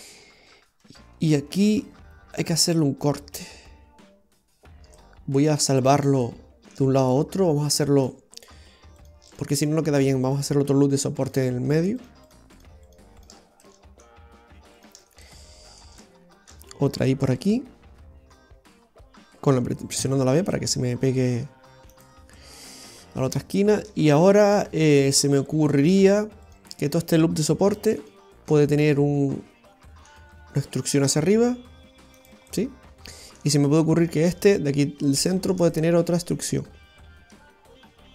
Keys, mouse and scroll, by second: 4.6 scroll down 2, 5.0 shift+middle click, 8.1 click, 9.1 right click, 9.4 shift+right click, 10.2 shift+right click, 12.0 shift+right click, 12.3 shift+right click, 13.4 shift+right click, 13.5 scroll down 1, 13.6 middle click, 14.8 shift+right click, 15.3 middle click, 16.4 shift+middle click, 22.4 middle click, 23.1 scroll down 1, 23.4 shift+middle click, 24.8-25.2 scroll down 1, 26.5 right click, 27.8 alt+shift+right click, 28.8 middle click, 32.5 middle click, 34.1 right click, 35.4 ctrl+shift+right click, 35.8 middle click.